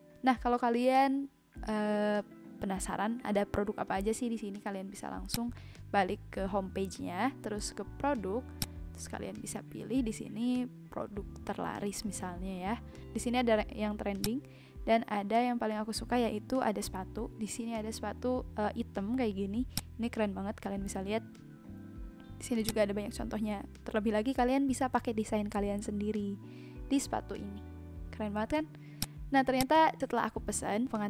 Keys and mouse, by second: 5.2 click, 14.3 click, 19.7 click, 28.9 click.